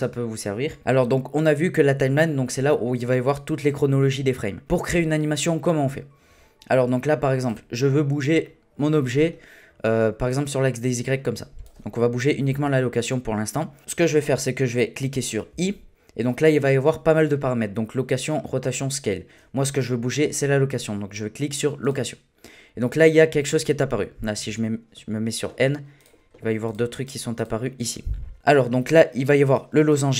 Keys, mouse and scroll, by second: 7.4 click, 8.2 scroll down 1, 8.4-10.3 middle drag, 10.3-12.5 drag, 12.5 ctrl+z, 15.5 i, 24.4 n, 26.0 click, 26.6 click, 27.0-29.4 drag, 29.6-30.1 drag.